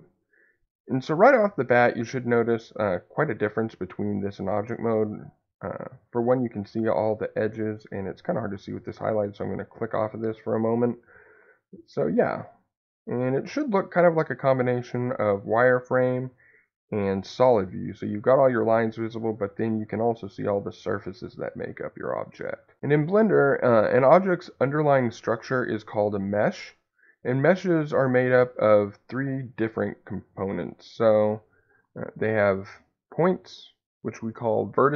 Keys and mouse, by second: 5.1-6.3 middle drag, 9.6 click, 13.2-17.8 middle drag, 32.2 click.